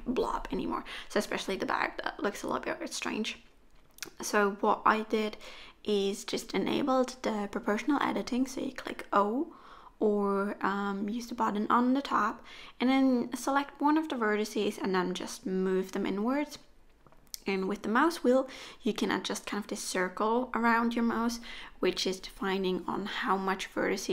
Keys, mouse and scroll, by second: 1.5 click, 2.6 middle click, 4.2 1, 4.8 click, 5.1 middle click, 6.6 KP_3, 7.7 g, 15.5 middle click, 20.1 click, 20.5 middle click, 21.2 KP_3, 22.0-23.2 scroll up 1.